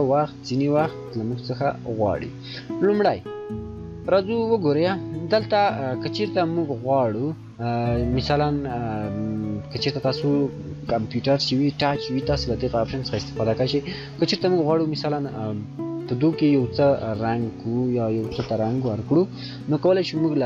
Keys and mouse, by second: 8.5 shift+click, 13.5 shift+click.